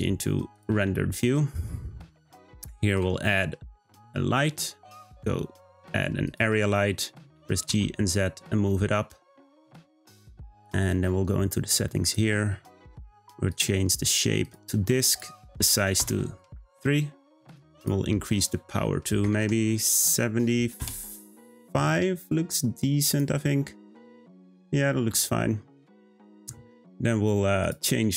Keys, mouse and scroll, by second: 2.9 shift+a, 7.3 g, 12.0 click, 13.5-20.8 drag.